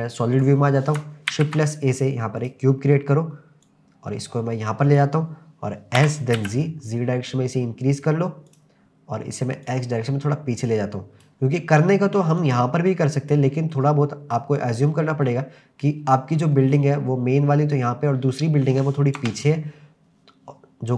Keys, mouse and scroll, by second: 0.4 click, 1.3 shift+a, 3.6 click, 6.0 s, 6.4 z, 8.5 click, 9.6 click, 12.4 click, 13.7-14.3 middle drag, 14.7-15.2 scroll down 3, 15.2-15.9 middle drag, 18.3 m, 19.2 KP_0.